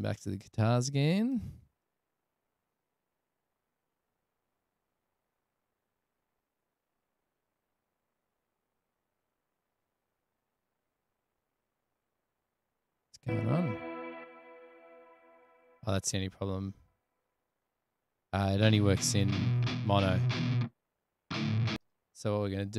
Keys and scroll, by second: 0.0 super+=, 2.8 space, 5.0 space, 5.5 space, 19.2 super+=, 21.9 space.